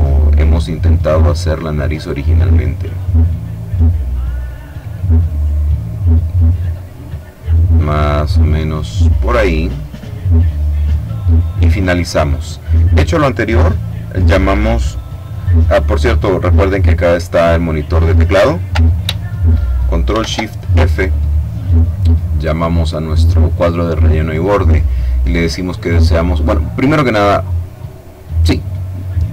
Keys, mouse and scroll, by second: 0.4 click, 1.5 click, 4.5 click, 5.5 click, 7.1 click, 7.9-9.1 drag, 9.3 click, 10.7-11.9 drag, 20.4 ctrl+shift+f, 23.1-24.3 drag.